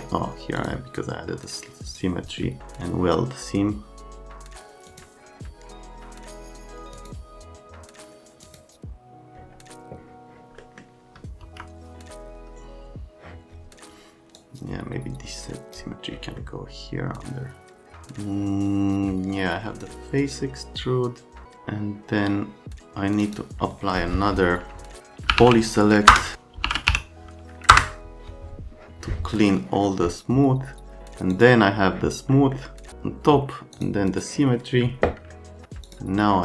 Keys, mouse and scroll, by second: 0.6 click, 1.9 click, 4.9 click, 6.9 click, 8.4 click, 10.6 middle click, 11.4 F3, 14.4 click, 16.4 right click, 23.2 click, 25.1-27.4 typing, 26.1 Return, 27.7 Return, 29.4 right click, 31.3 click, 32.3 right click, 33.7 click, 35.3 alt+right click, 35.8 middle click.